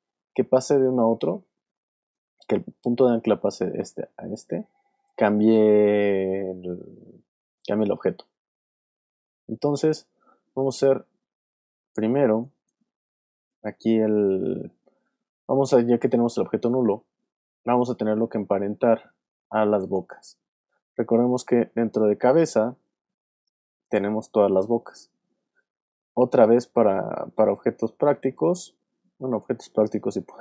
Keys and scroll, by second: 0.3 super+z, 2.5 shift+super+z, 3.3 super+z, 10.1 alt+shift+super+z, 12.2 alt+space, 13.5 alt+space, 14.4 space.